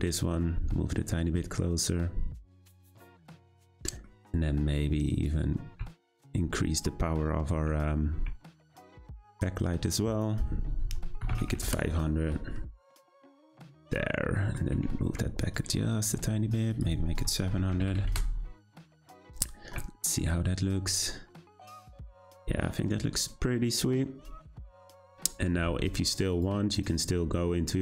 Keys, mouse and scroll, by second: 3.8-4.1 middle drag, 4.1 scroll down 2, 5.1 click, 5.9 z, 8.3 `, 10.2-11.6 drag, 11.6 0, 14.3-14.7 middle drag, 14.7 g, 16.7-17.8 drag, 17.8 0, 19.9 `, 26.4 click.